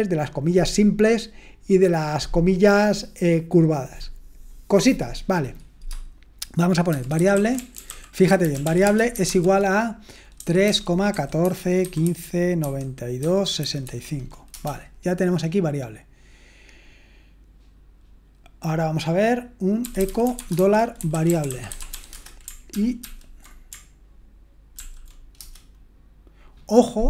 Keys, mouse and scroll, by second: 5.9-6.9 scroll down 1, 6.7-14.3 typing, 14.5 Return, 19.6-25.1 typing, 22.7 ctrl+p, 25.4 Return.